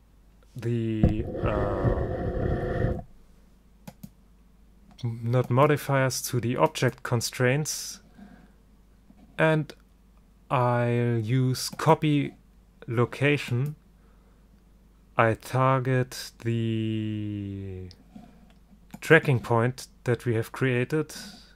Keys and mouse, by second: 4.0-8.6 drag, 13.6-15.4 drag.